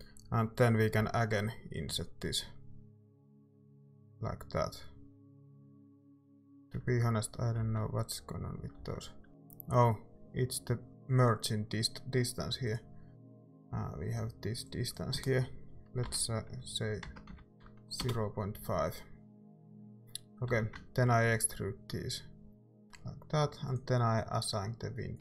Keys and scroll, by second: 1.0 i, 3.1 e, 6.0 Tab, 6.2 Tab, 7.6 ctrl+z, 8.8 ctrl+z, 9.3 i, 16.1-17.8 typing, 18.0 Return, 20.5 e.